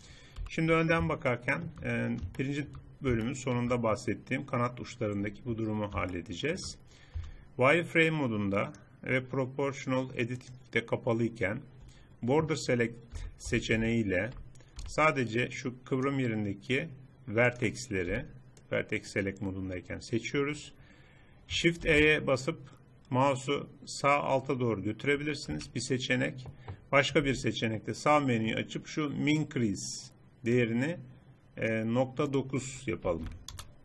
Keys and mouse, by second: 0.5 KP_1, 5.3 Tab, 7.2 z, 8.9-10.6 drag, 13.2 a, 13.5 a, 13.9 a, 14.9 b, 17.5 click, 18.2 b, 21.9 shift+e, 27.3 n, 30.7-33.8 drag.